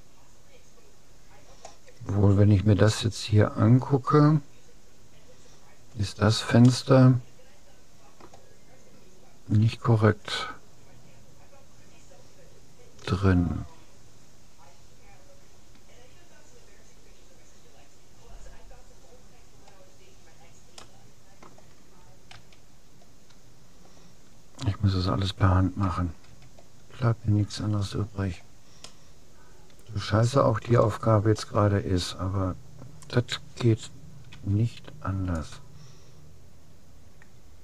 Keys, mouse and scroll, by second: 6.8-8.4 middle drag, 19.0-21.6 middle drag, 21.6-22.6 drag, 22.4 a, 26.3 a, 27.0 middle click, 29.0-30.6 middle drag, 31.2-32.6 scroll up 1, 32.6-34.2 middle drag, 34.4 c.